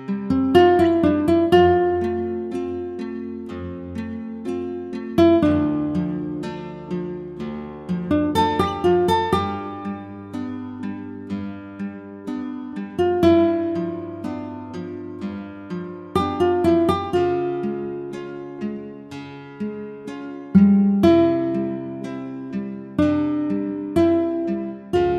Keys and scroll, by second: 4.5 ctrl+t, 15.6 Return, 16.4 ctrl+=, 23.3 ctrl+shift+t.